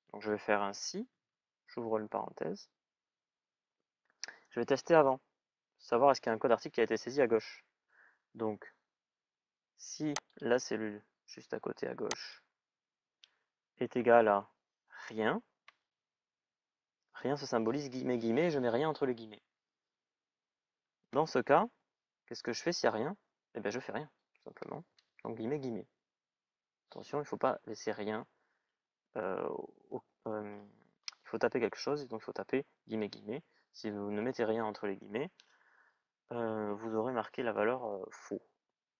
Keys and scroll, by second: 0.4 shift+s, 0.8 shift+i.